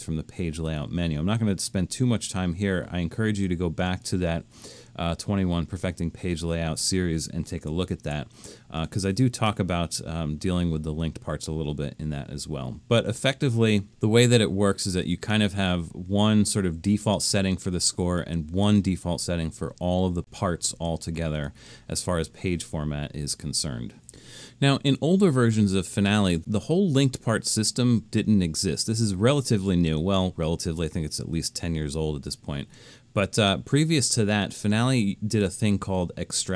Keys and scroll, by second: 8.0 super+-.